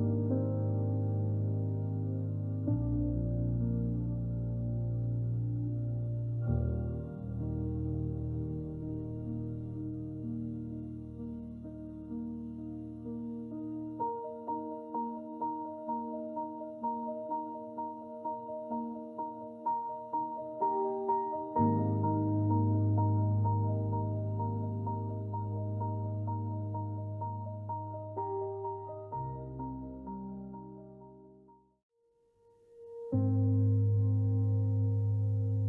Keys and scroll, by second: 0.1 j, 2.3 Delete, 11.1 shift+t, 14.9 shift+d, 15.7 shift+r, 16.3 Return, 17.0-18.0 typing, 28.7 Escape, 30.8 Delete.